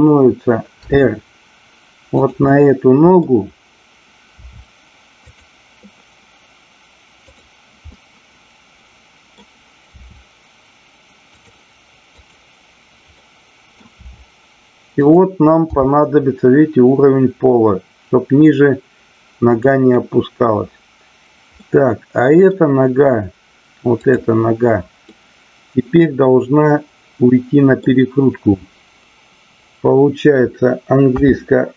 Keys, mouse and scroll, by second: 0.7 r, 2.2 click, 2.4 middle click, 4.4 r, 5.1 click, 7.2-8.3 drag, 8.3-9.3 middle drag, 9.9 r, 11.3 click, 13.2 middle click, 14.9 click, 14.9 r, 15.7 g, 19.6 click, 21.5-22.4 middle drag, 23.8 click, 25.1-27.9 middle drag.